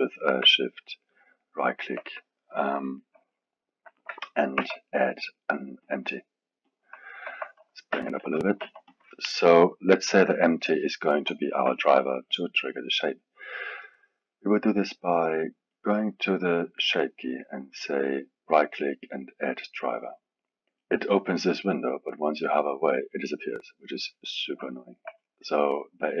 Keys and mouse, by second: 1.4 shift+right click, 2.8-4.5 alt+middle drag, 4.5 shift+a, 7.9 s, 8.6 s, 11.3-13.8 alt+middle drag, 13.8-14.2 drag, 15.7 click, 17.7 right click, 24.7-26.2 alt+middle drag.